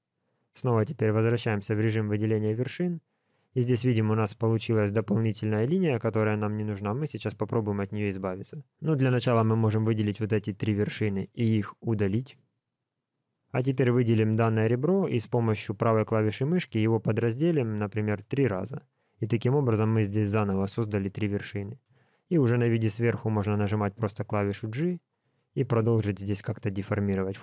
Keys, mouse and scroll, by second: 0.6 click, 1.3-1.9 scroll up 3, 1.9 shift+middle click, 2.5 scroll up 1, 3.2 middle click, 5.7 shift+middle click, 8.9 click, 9.7 shift+click, 10.4 shift+click, 11.3 x, 13.5 click, 14.3 shift+click, 15.0 right click, 17.9 click, 18.3 click, 21.0 click, 21.8 KP_7, 23.5 g, 24.9 click, 25.2 g, 26.3 click, 26.5 g.